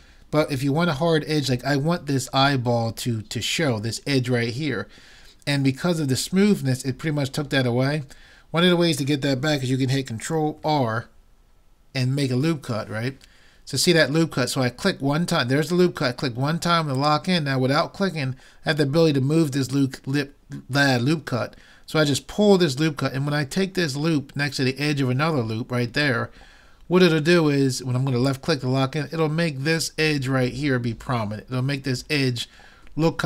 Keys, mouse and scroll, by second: 10.6 ctrl+r.